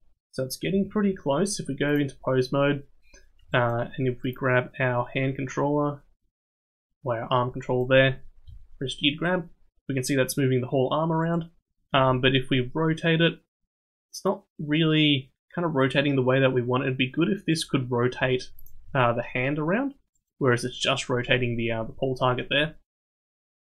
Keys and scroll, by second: 0.8 ctrl+Tab, 8.4 g, 11.9 r, 18.2 g, 18.8 r, 22.3 ctrl+z.